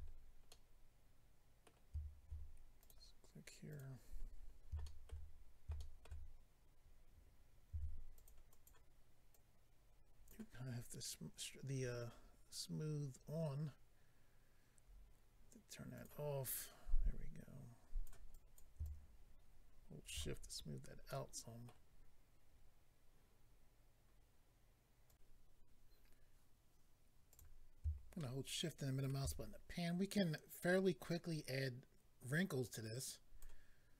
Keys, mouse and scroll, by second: 0.1-0.4 scroll down 3, 0.5 middle click, 2.8 click, 2.9 click, 3.7 click, 3.8 click, 4.0-4.8 scroll up 6, 4.8 shift+middle click, 5.3 scroll up 1, 5.7 shift+middle click, 7.7 f, 8.1 click, 8.3 click, 8.5 click, 8.6 double click, 9.3 double click, 11.6-12.9 scroll down 4, 12.9 scroll down 1, 13.4-14.1 scroll down 2, 14.8-15.1 scroll up 4, 15.9 click, 16.0 click, 16.5 click, 18.3 click, 18.8 shift+click, 20.3-21.1 scroll down 7, 21.1 middle click, 25.1 click, 27.3 click, 27.4 click, 28.2 shift+middle click, 32.6 click.